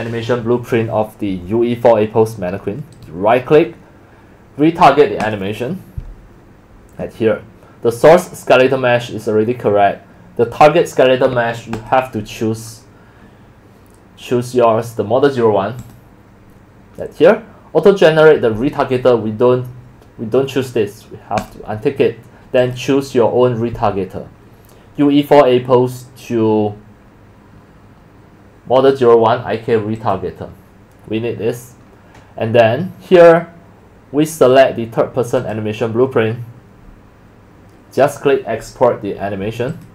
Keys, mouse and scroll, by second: 5.2 click, 11.8 click, 13.5 drag, 15.8 click, 21.4 click, 22.6 click, 27.7 scroll down 1, 30.0 click, 33.3-34.5 drag, 35.4 click, 39.7 click.